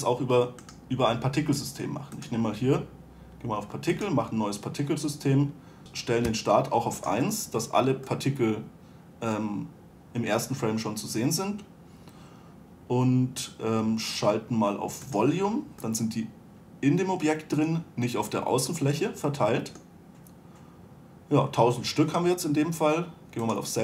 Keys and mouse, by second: 1.0-2.5 right drag, 2.5-9.1 drag, 15.4-17.1 drag, 17.1 middle drag.